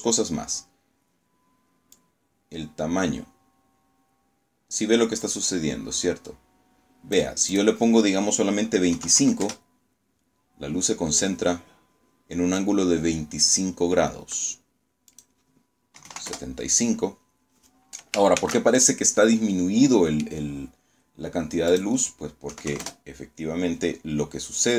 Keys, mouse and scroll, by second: 0.8-6.2 drag, 6.4 click, 7.8 KP_2, 8.0 KP_5, 8.3 KP_Enter, 14.0 click, 14.8 KP_7, 15.0 KP_5, 15.2 KP_Enter, 17.2 shift+z, 17.6-19.3 shift+drag, 20.6 click, 21.4 KP_2, 21.6 KP_5, 21.7 KP_Enter.